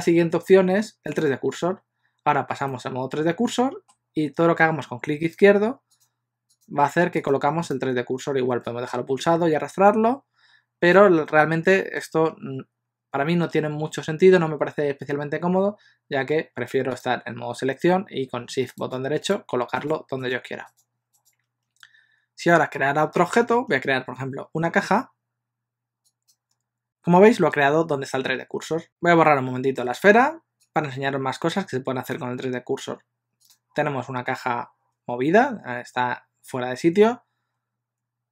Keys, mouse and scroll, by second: 1.2 click, 2.7 middle click, 5.4 click, 6.2 click, 9.0 click, 17.0 click, 18.9 shift+right click, 23.6 shift+a, 28.8 click, 30.0 x, 33.5 click.